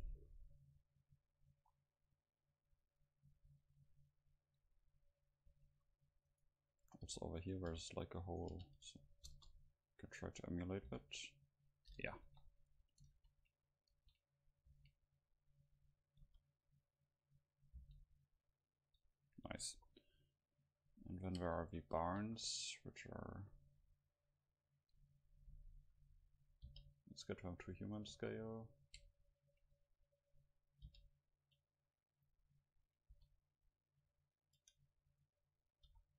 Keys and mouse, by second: 5.5 KP_7, 6.3 right click, 7.1 g, 7.7 g, 8.5 g, 9.0 right click, 9.1 middle click, 9.3 KP_0, 9.5 middle click, 10.2 click, 10.9 g, 12.0-13.6 drag, 12.3 KP_7, 13.2 shift+s, 14.0 shift+d, 14.6-18.0 drag, 14.8 shift+d, 16.3 KP_0, 17.8 g, 19.0-20.8 drag, 21.6 a, 22.0-24.6 drag, 22.2 shift+a, 25.0 middle click, 25.8 KP_7, 26.7 g, 28.0 click, 28.1 KP_5, 30.9 g, 32.3-34.1 drag, 32.6-33.7 middle drag, 33.1 s, 34.6 Tab, 35.1-36.1 right drag, 35.9 e.